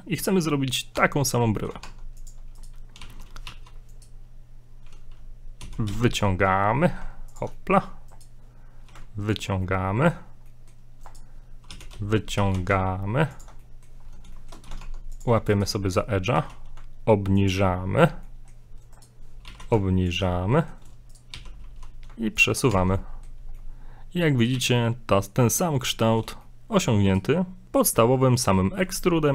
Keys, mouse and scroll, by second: 1.0 Tab, 1.6 middle click, 1.8 ctrl+Tab, 2.6 right click, 3.0 right click, 3.0 g, 5.6 e, 7.5 middle click, 8.1 right click, 8.9 e, 9.6 middle click, 10.5 middle click, 11.0 right click, 11.7 e, 13.6 middle click, 14.0 scroll up 2, 14.3 shift+middle click, 14.5 scroll down 1, 15.0 ctrl+Tab, 15.5 right click, 16.3 g, 18.3 middle click, 19.0 right click, 19.4 g, 20.3 middle click, 21.1 right click, 21.4 g, 22.7 Tab, 22.9 scroll down 1, 23.0 middle click, 24.5 a, 24.8 middle click, 25.7 middle click, 26.1 shift+middle click, 26.4 middle click, 27.1 right click, 27.4-27.7 scroll up 1.